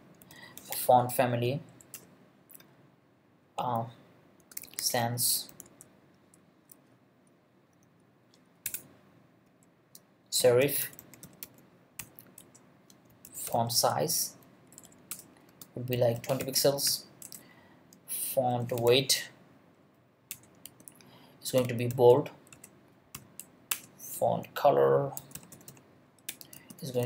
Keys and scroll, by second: 0.0-1.2 typing, 1.7 Down, 1.9 Return, 4.4-6.1 typing, 8.6-14.0 typing, 12.4 Return, 14.7 Down, 15.1 Return, 15.5-19.4 typing, 19.8 Up, 20.3 Return, 20.6-23.1 typing, 23.7 Return, 24.9-27.0 typing, 26.3 Return.